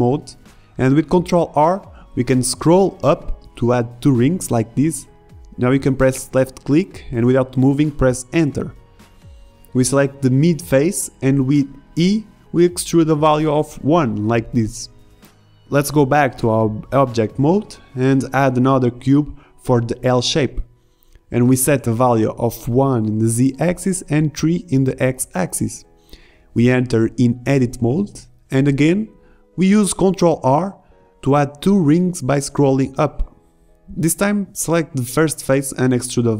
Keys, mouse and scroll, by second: 1.1 ctrl+r, 9.9 ctrl+Tab, 10.9 click, 11.5-12.9 middle drag, 12.9 e, 16.6 Tab, 17.4 shift+d, 17.4 Delete, 17.6 shift+a, 18.3 g, 26.5 ctrl+z, 29.6 g, 31.7 KP_1, 32.1 Tab, 33.7 ctrl+r, 35.8 ctrl+Tab.